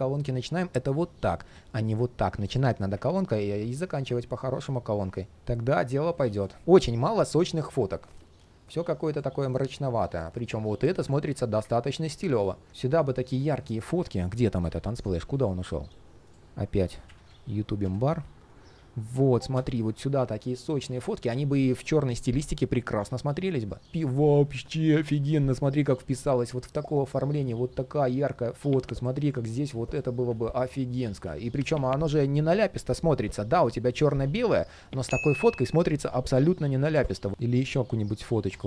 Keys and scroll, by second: 2.9 super+z, 5.9 ctrl+shift+4, 14.6 super+/, 30.3 super+z.